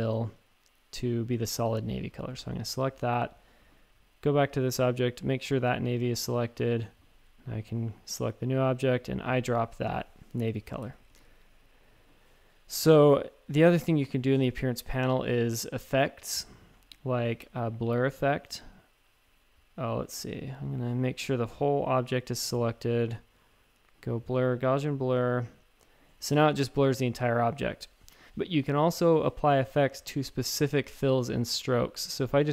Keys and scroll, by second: 10.8 shift+super+a, 11.1-12.4 typing, 26.5 space, 28.0 typing.